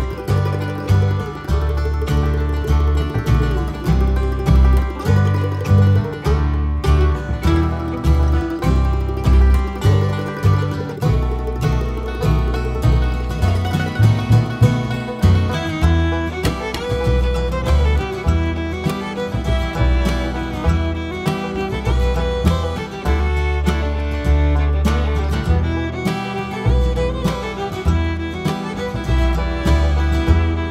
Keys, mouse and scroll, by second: 0.0 t, 1.0 g, 1.7 z, 1.9-2.5 scroll down 4, 2.2 alt+a, 2.5-2.9 scroll up 2, 2.9 Tab, 3.8 ctrl+z, 5.8 g, 5.9 Tab, 6.0 scroll down 2, 6.8 alt+a, 8.0-8.4 scroll up 1, 8.4-9.3 scroll down 1, 9.3 click, 9.5 Tab, 9.7 click, 10.0 KP_Decimal, 10.3-10.7 scroll up 1, 10.9 click, 11.4 ctrl+l, 12.2 b, 13.2 g, 13.4 alt+a, 13.6-14.0 scroll down 1, 14.0 Tab, 14.2 scroll down 1, 14.4 alt+a, 14.9 scroll up 1, 15.8-16.4 scroll down 1, 16.9 click, 17.0 Tab, 18.2 shift+d, 18.9-20.1 drag, 20.4 ctrl+j, 21.2 click, 21.6 x, 22.1 click, 22.6 Tab, 23.4 shift+d, 23.4 right click, 24.0 click, 24.8 ctrl+j, 25.1 click, 25.6 x, 25.8 click, 26.0 Tab, 27.3 click, 28.1 shift+d, 28.7-30.7 drag, 29.9-30.2 scroll up 1, 30.2 KP_Decimal.